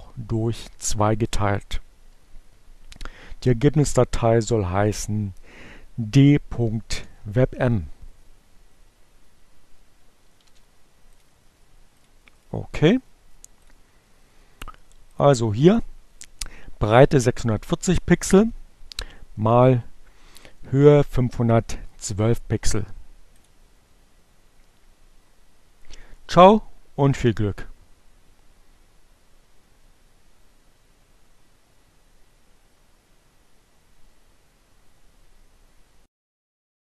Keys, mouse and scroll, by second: 0.3 Right, 0.6 Delete, 2.9 d, 5.5 Return, 10.8 ctrl+c, 11.6 click, 12.6 click, 13.2 right click, 14.7 click, 16.5 click, 23.4 click.